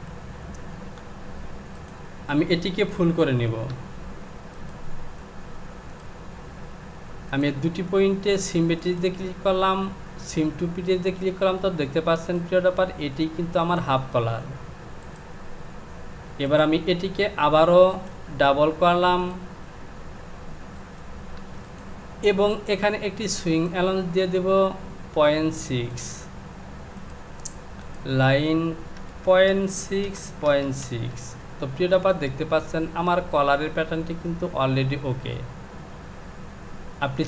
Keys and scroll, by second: 0.4 Home, 3.0 Home, 29.0 Down, 30.5 KP_Decimal, 30.8 KP_6, 31.1 Down.